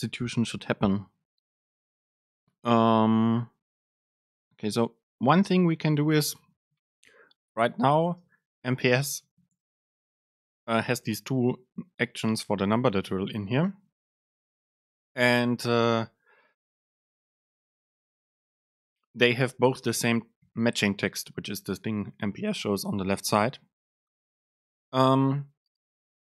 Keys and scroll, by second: 5.4 BackSpace, 8.2 super+space.